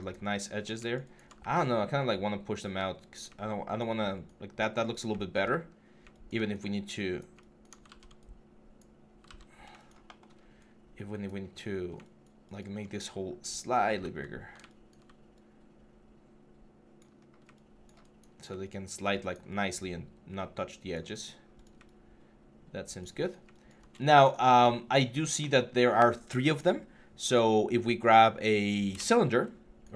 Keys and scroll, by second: 1.1 w, 5.4 4, 7.6 ctrl+z, 9.0 ctrl+z, 21.0 3.